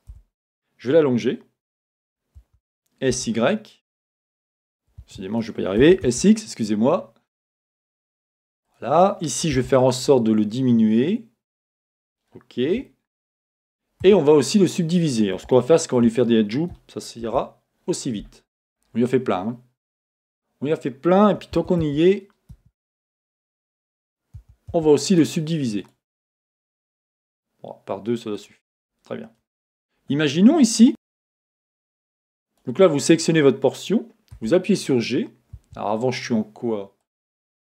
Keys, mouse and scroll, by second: 0.2 Return, 2.4 s, 5.2 Escape, 8.7 click, 9.5 s, 12.0 click, 12.8-25.2 shift+middle drag, 14.0-14.6 scroll up 2, 14.6 Tab, 14.6-15.5 scroll up 2, 17.2 ctrl+r, 22.6 Escape, 24.4 a, 25.2-28.3 right drag, 28.3 click, 30.9-34.4 middle drag, 30.9 b, 34.4 g, 35.7 Escape, 37.0-37.7 drag.